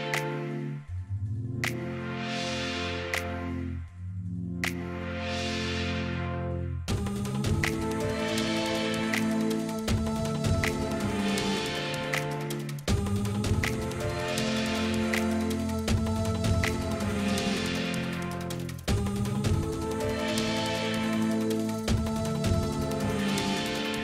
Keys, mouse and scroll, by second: 0.4 right click, 0.9 right click, 13.5 right click, 14.7 right click, 15.1 right click, 16.1 right click.